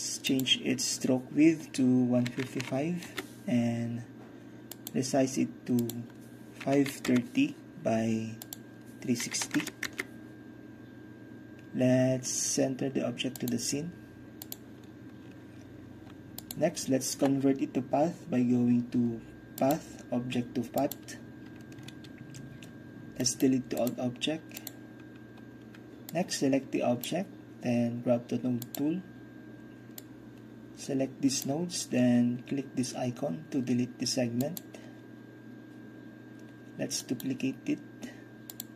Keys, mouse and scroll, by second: 0.4 click, 2.3 KP_1, 2.5 KP_5, 2.7 KP_5, 3.1 Return, 4.8-6.7 drag, 6.7 KP_5, 6.8 click, 7.1 KP_3, 7.1 KP_0, 8.5 click, 9.3 KP_3, 9.5 KP_6, 9.6 KP_0, 9.9 Return, 13.4-18.4 drag, 19.7-23.0 drag, 23.3 middle click, 23.9-24.5 middle drag, 24.7 drag, 26.2-28.0 drag, 28.7 click, 29.5 drag, 30.0-31.6 drag, 31.6-33.0 middle drag, 34.5-36.5 middle drag, 37.1 middle click, 37.3-38.6 right drag, 38.6 middle click.